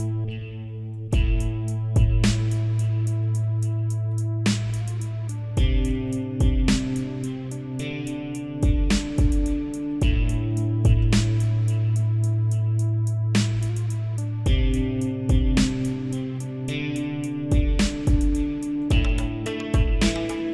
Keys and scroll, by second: 6.0 ctrl+s, 11.1 ctrl+s.